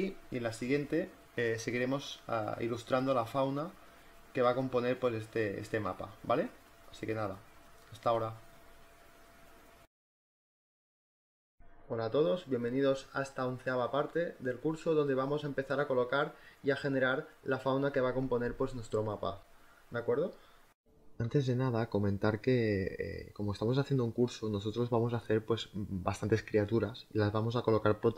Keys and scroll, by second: 4.4 space, 14.0 z, 14.9 space.